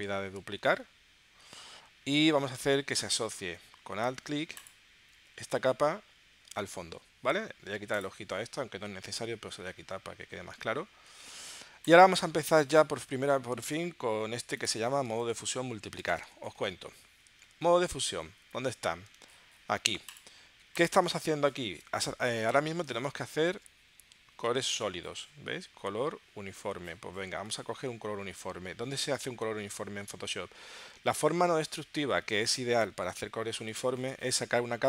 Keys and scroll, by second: 12.9 super+Tab, 15.1 space, 16.0 space, 16.5 super+Tab, 23.1 super+Tab, 27.5 super+Tab.